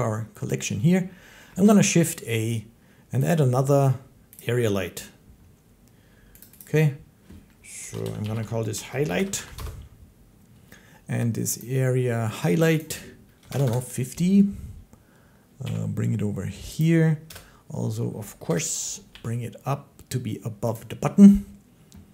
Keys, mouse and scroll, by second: 1.3 a, 3.1 click, 4.2 click, 6.2 click, 6.4 click, 7.6-9.4 typing, 11.4 click, 12.6 click, 13.0-13.7 typing, 15.4 g, 16.6 click, 17.1-19.4 typing, 20.6 click.